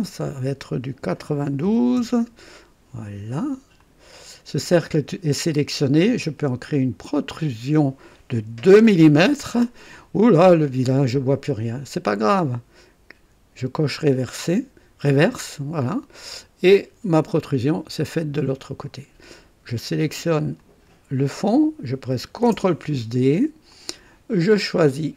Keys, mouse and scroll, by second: 1.3 9, 1.3 KP_9, 1.6 2, 1.6 KP_2, 1.9 Return, 3.7 click, 7.1 click, 8.7 KP_2, 13.6 click, 15.4 click, 16.2-18.7 drag, 20.5 click, 22.4 ctrl+d, 23.7 click.